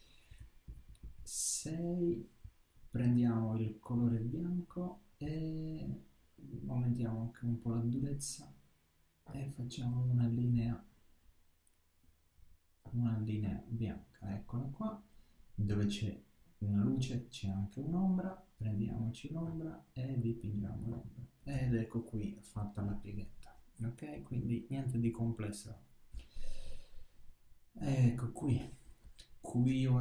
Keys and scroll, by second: 22.0 super+-.